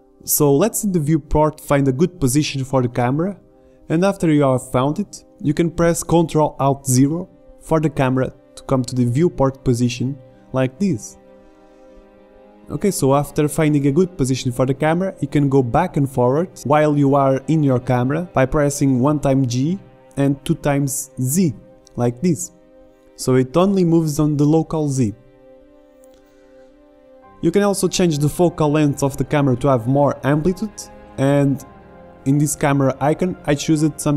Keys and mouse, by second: 7.6 ctrl+alt+KP_0, 14.6 r, 18.0 g, 32.8-34.1 drag.